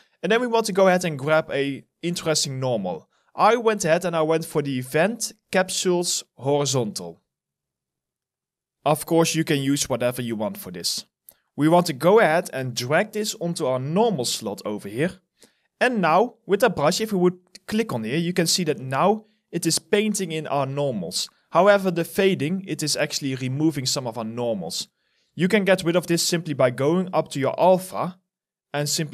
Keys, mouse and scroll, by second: 0.6 scroll up 1, 1.4 scroll down 1, 14.9 alt+right click, 16.0 alt+middle click, 18.7 ctrl+z, 20.4 ctrl+z, 25.0 ctrl+z, 25.6 scroll up 1.